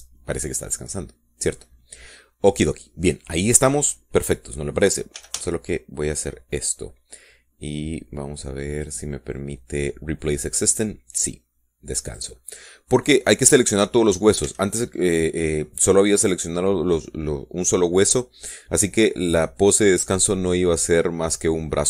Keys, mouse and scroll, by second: 0.0 Return, 6.4 a, 10.0 click, 12.0 click, 13.3 click, 14.1 middle click, 14.3 scroll down 1, 14.5-15.9 middle drag, 15.7 a, 16.1 scroll up 1, 16.3-16.7 scroll down 1, 16.7-18.0 middle drag, 18.5-20.1 middle drag.